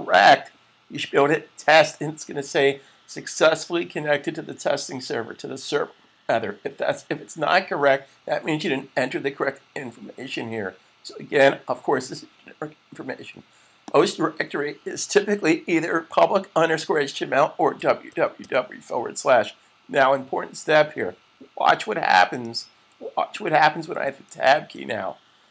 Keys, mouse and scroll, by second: 13.8 click, 17.5-18.1 typing, 22.4-23.1 typing, 25.2 typing.